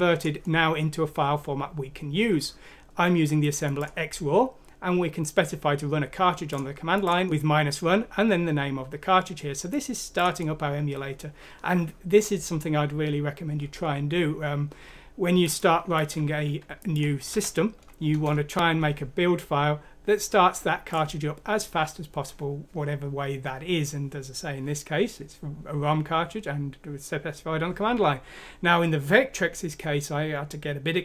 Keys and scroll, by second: 17.3 F6, 18.1 Return.